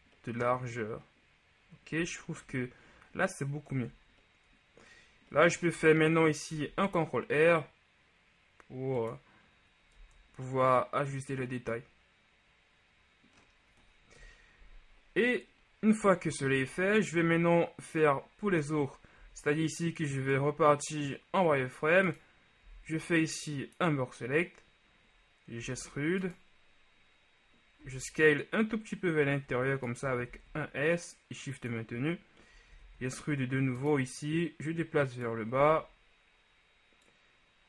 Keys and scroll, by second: 3.8 Tab, 6.6 ctrl+r, 10.2 Tab, 14.3 KP_1, 18.6 Tab, 19.3 z, 22.8 b, 26.0 e, 30.4 s, 32.8 e, 32.9 z, 35.8 z.